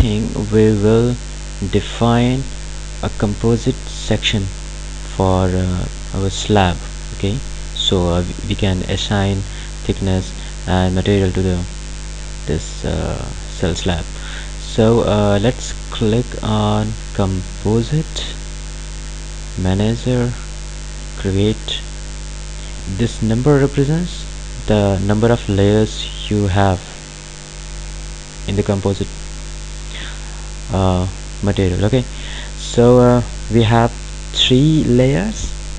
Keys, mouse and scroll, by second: 8.6 click, 17.4 click.